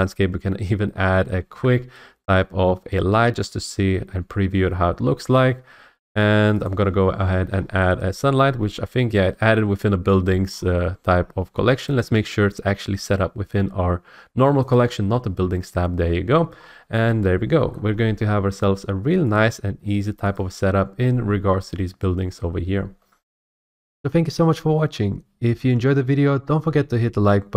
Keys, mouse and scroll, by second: 1.4 a, 6.6 click, 7.2 click, 7.5 middle click, 7.6 scroll, 8.5 scroll, 10.2 middle click, 10.7-11.0 scroll, 11.9 click, 14.7 click, 16.5 scroll, 17.7 middle click, 17.9 middle click, 19.3 click, 20.3 click, 23.5 F8, 24.5 middle click, 26.5 middle click.